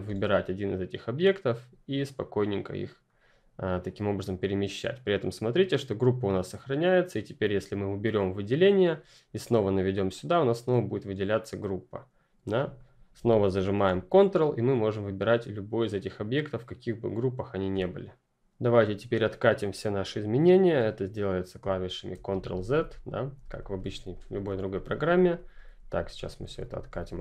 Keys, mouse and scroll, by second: 6.2 click, 10.1 click, 14.3 click, 21.5 ctrl+click, 22.1 ctrl+z.